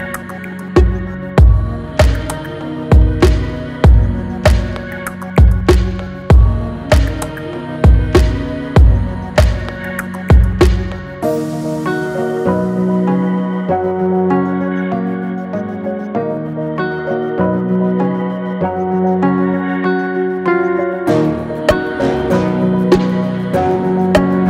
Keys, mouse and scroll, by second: 2.8-3.2 scroll up 1, 3.6 click, 4.0 space, 5.4 click, 11.3 click, 17.9 space, 18.1 click, 18.4 space, 22.6 scroll up 1, 23.2 click.